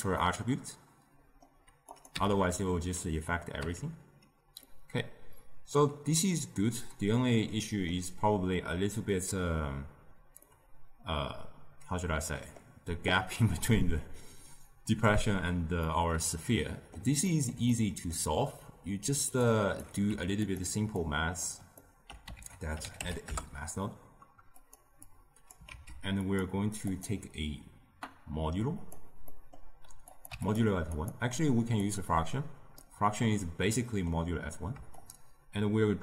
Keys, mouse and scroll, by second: 0.1-1.8 middle drag, 1.8 click, 2.1 m, 3.6 m, 4.6-19.4 middle drag, 19.4 click, 20.0 g, 20.9 click, 21.8 ctrl+middle click, 22.3 ctrl+a, 25.0 click, 25.6 shift+d, 26.8-29.2 drag, 29.2 middle click, 30.0 click, 30.8-32.7 drag, 32.7-34.9 middle drag, 34.9-36.0 shift+drag.